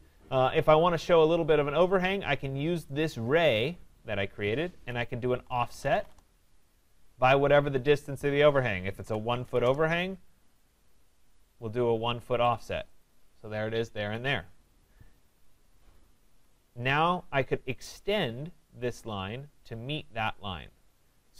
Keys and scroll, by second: 6.0 Return, 16.2 Escape.